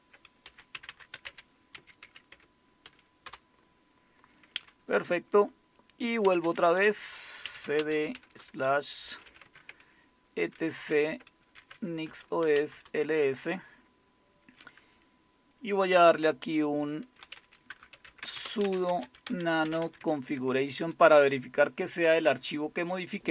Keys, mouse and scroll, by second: 0.2-3.4 typing, 6.2-13.1 typing, 17.8-20.3 typing, 21.1 Return, 22.3 Down, 22.6-23.3 typing.